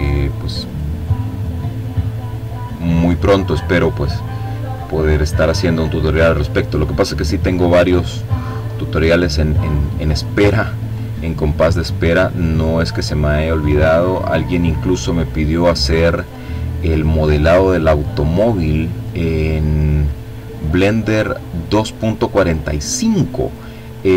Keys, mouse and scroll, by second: 5.0 click, 6.6-9.3 drag, 9.7-11.2 drag, 11.3-12.5 drag, 13.1 click, 13.8 click, 15.2-17.4 drag, 18.5-20.2 drag, 20.5-21.9 drag, 23.7-24.1 drag.